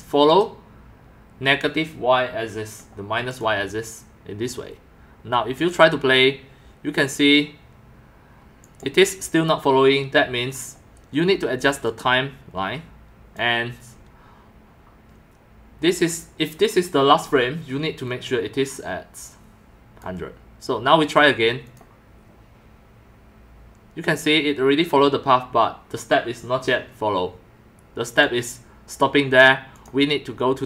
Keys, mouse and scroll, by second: 0.3 click, 3.3 click, 5.6 click, 8.6 click, 11.9-13.4 drag, 14.3 click, 18.0-20.0 drag, 21.0 click, 21.7 click, 28.1 click, 28.3 drag, 29.7 click.